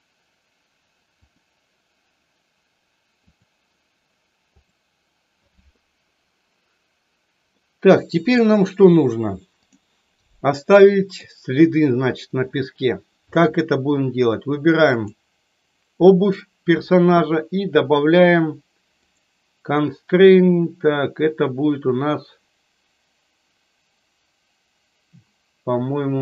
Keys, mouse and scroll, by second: 7.5-8.4 middle drag, 9.7 click, 10.9 middle click, 14.8 click, 19.0-25.8 drag.